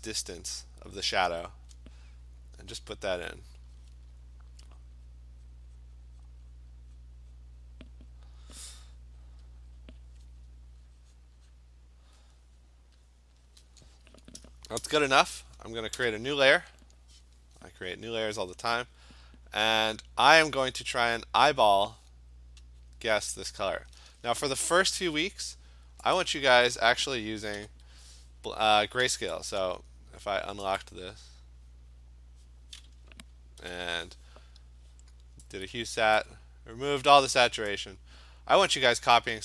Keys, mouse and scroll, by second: 0.7 click, 1.2 click, 1.7 click, 2.8 click, 3.6 click, 3.8 click, 4.8 click, 5.1 click, 5.5 click, 5.8 click, 6.1 click, 6.3 click, 6.6 click, 7.0 click, 7.4 click, 7.7 click, 7.9 click, 9.0 click, 9.3 click, 9.5 click, 9.6 click, 9.8 click, 10.0 click, 10.9 click, 11.2 click, 11.5 click, 13.1 click, 13.5 click, 15.0 ctrl+shift+n, 16.0 Return, 21.1 click, 21.6 click, 22.9 click, 23.9 click, 24.8 Escape, 26.2 click, 27.6 ctrl+u, 29.5 click, 30.8 click, 33.8 ctrl+u, 36.2 click, 37.7 click.